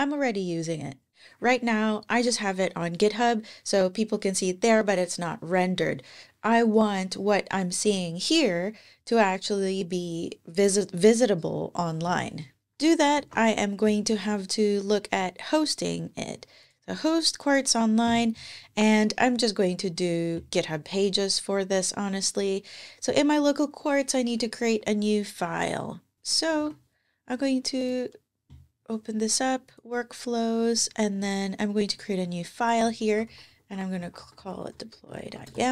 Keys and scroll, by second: 13.1 ctrl+Tab, 26.1 typing, 26.4 ctrl+`, 33.0-35.5 typing.